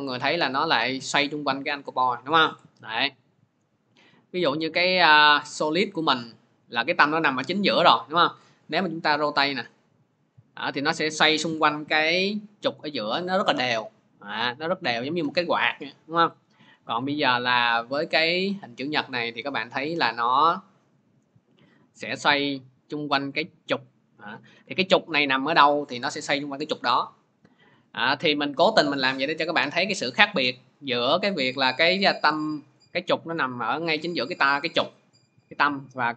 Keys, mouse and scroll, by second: 2.3 click, 2.6 ctrl+z, 3.6 click, 4.8 click, 8.4 r, 16.2 click, 16.7 ctrl+z, 17.9 click, 18.8 click, 23.2 click, 24.4 ctrl+z, 28.2 middle click, 29.3 middle click, 31.5 click, 32.4 click.